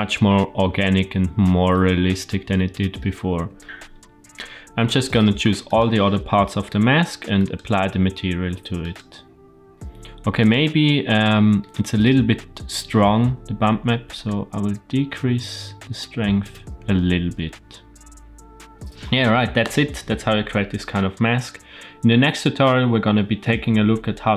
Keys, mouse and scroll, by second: 1.6-2.9 middle drag, 3.5 shift+middle click, 3.6 click, 5.6 click, 7.3-8.9 drag, 9.7 shift+middle click, 10.3 click, 11.1 middle click, 12.3-13.3 scroll up 1, 14.0-18.7 drag.